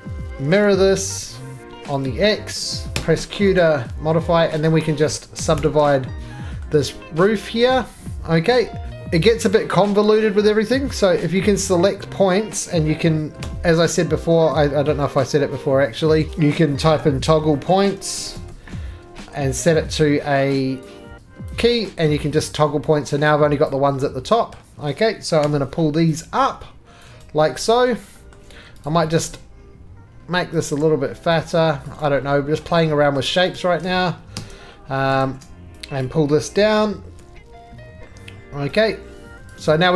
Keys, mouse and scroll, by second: 0.3 scroll, 0.4 alt+x, 2.1 click, 2.9 q, 3.6 right click, 4.1 middle click, 4.3 3, 4.7 click, 5.4 s, 5.5 s, 6.6 middle click, 12.7 middle click, 12.7 click, 13.4 f, 16.6-19.0 typing, 20.8 click, 21.6 click, 22.6-23.6 scroll, 23.7 click, 24.5 scroll, 25.4 g, 27.0 click, 27.2 right click, 27.9 middle click, 28.3 middle click, 28.5 scroll, 28.5 3, 28.9 click, 29.3 middle click, 30.7 shift+click, 31.8 click, 32.0 right click, 32.6 middle click, 32.9-33.2 scroll, 33.2 middle click, 33.2-33.5 scroll down 2, 33.5 click, 34.3 s, 35.1 middle click, 35.2 s, 36.1 click, 36.6 middle click, 37.2-38.4 scroll, 37.2 g, 39.4 click, 39.7 right click.